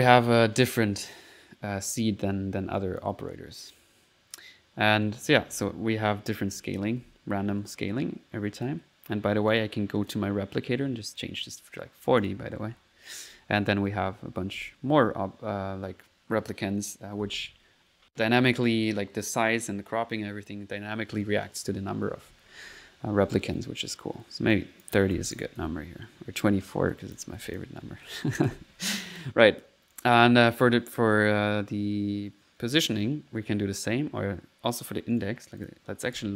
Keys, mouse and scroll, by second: 0.2 middle click, 2.0 click, 2.8 click, 4.5-7.5 typing, 8.6 click, 9.3 middle click, 9.6 click, 11.2 click, 11.7 click, 12.3-14.6 typing, 22.6-23.2 typing, 24.5 click, 25.5 typing, 26.9 click, 28.4 typing, 28.9 click, 29.6 middle click, 29.9 click, 35.1 right click, 35.1-36.3 typing, 35.6 click.